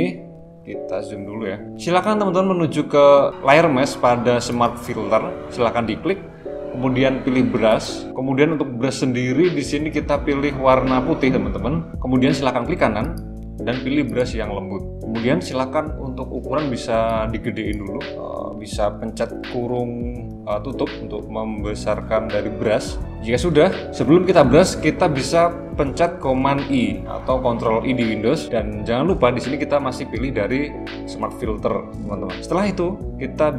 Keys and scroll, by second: 26.7 super+i.